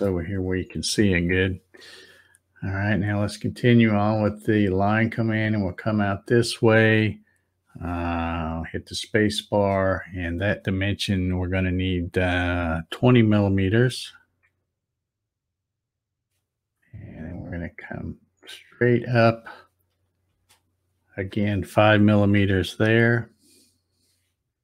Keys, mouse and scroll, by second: 4.6-9.6 drag, 9.5 space, 17.4-20.5 drag, 20.3 space.